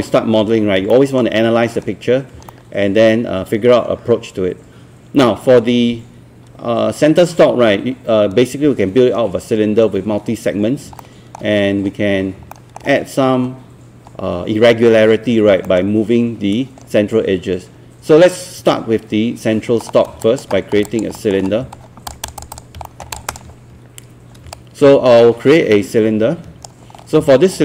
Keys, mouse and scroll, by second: 0.9 alt+middle click, 2.5-5.3 alt+middle drag, 11.0 alt+middle click, 12.5 alt+middle click, 15.0-15.5 scroll down 1, 15.7 alt+middle click, 19.9 scroll down 1, 20.3 alt+click, 20.9 alt+click, 21.2 middle click, 21.5 scroll up 1, 22.1 alt+click, 22.9 alt+middle click, 23.1 click, 24.5-26.9 shift+right drag, 27.1 scroll up 1, 27.5 alt+scroll down 1.